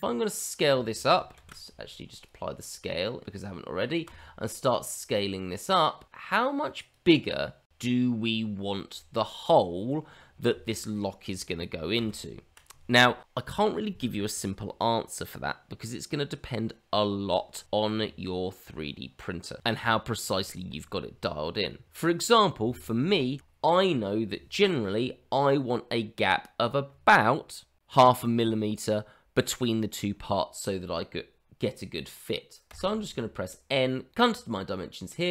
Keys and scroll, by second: 1.3 ctrl+a, 3.7 s, 12.1 ctrl+z, 32.6 n.